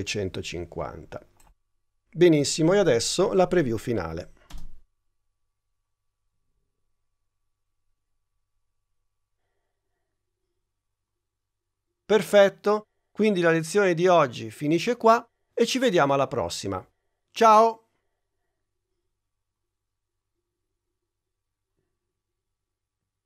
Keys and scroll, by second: 4.6 space.